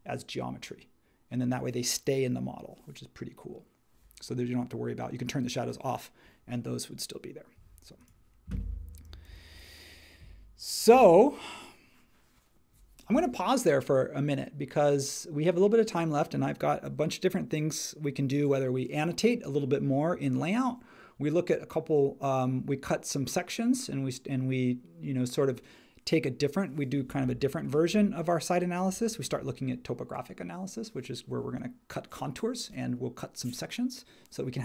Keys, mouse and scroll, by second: 9.2 super+s.